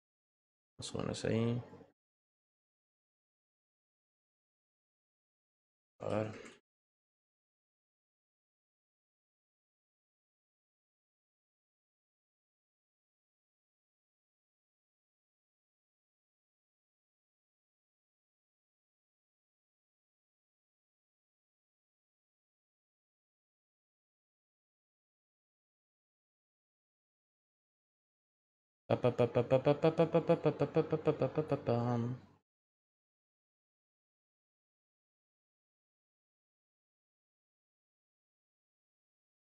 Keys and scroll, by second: 26.3 i, 26.9 f, 27.3 o, 38.5 t.